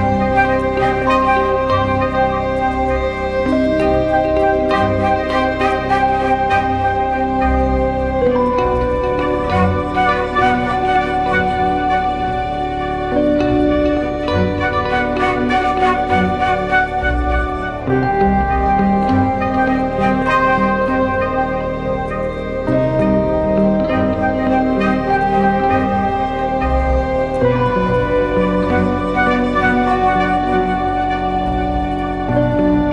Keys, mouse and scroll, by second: 0.4 typing, 6.4 double click, 14.3-17.1 scroll down 1, 32.7 ctrl+click.